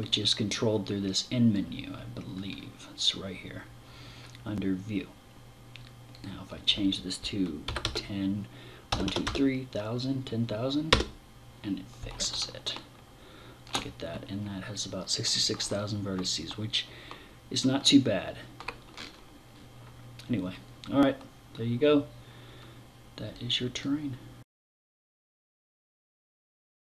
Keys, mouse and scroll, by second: 1.8 scroll up 2, 3.4 scroll up 2, 5.6 click, 12.2 shift+middle click, 15.3 middle click, 18.4 scroll up 2, 19.0-20.0 scroll down 3, 22.8 click.